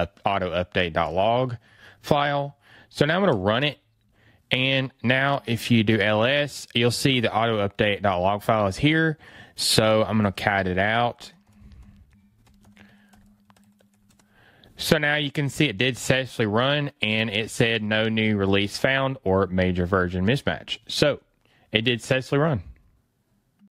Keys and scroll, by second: 12.5 BackSpace.